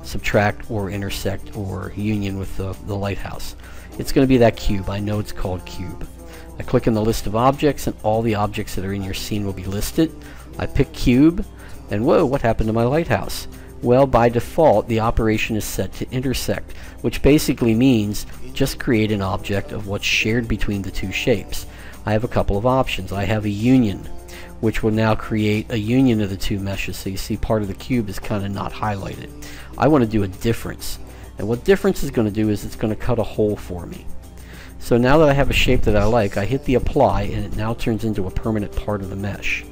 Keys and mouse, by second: 6.4-8.2 drag, 22.0-23.8 drag, 25.6-28.8 middle drag, 29.2-30.9 drag, 31.8-34.3 middle drag, 37.5-39.4 drag.